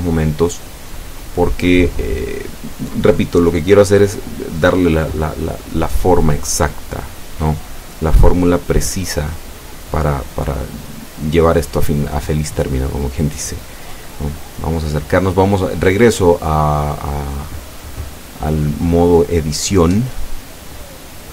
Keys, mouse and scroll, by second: 11.5 Tab, 12.1-16.6 middle drag, 17.6 click, 18.3-21.3 middle drag.